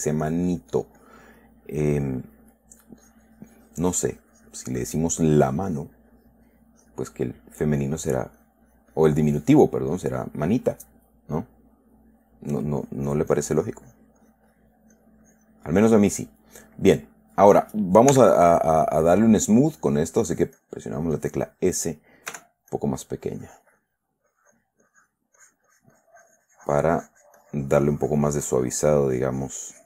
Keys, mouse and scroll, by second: 0.4-1.6 drag, 1.8 middle click, 2.6 middle click, 3.2-5.4 drag, 5.8-6.9 drag, 7.1 click, 8.0-10.0 drag, 10.3 click, 13.2-14.5 drag, 14.6 click, 15.3 click, 16.6 middle click, 17.3 middle click, 18.5 s, 19.4-22.2 drag, 22.7 f, 23.1 click, 23.6 click, 24.6 click, 25.2 click, 25.8-29.8 drag.